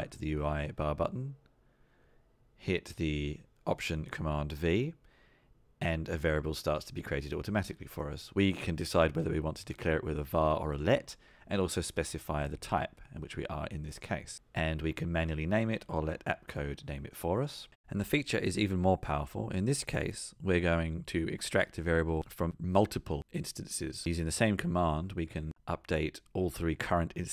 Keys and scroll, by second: 2.0 alt+super+v, 13.5 Return, 17.8 alt+super+v.